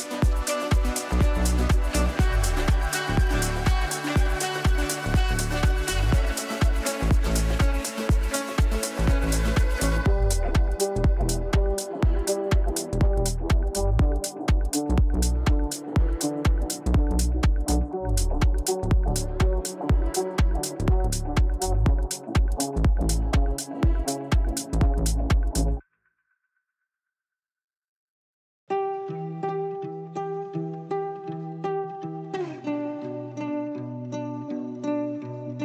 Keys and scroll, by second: 19.5 Insert, 21.1 Delete, 22.5 shift+Page_Up, 24.7 c.